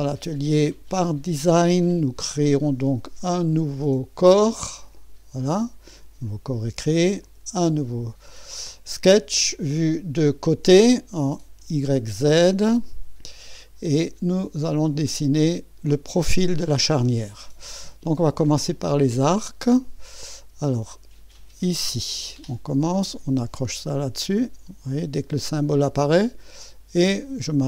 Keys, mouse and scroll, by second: 1.0 click, 4.2 click, 5.0 click, 7.2 click, 9.3 click, 12.8 click, 13.3 click, 14.0-15.1 scroll up 1, 15.1-16.3 right drag, 18.8 click, 21.6 click, 25.4 click.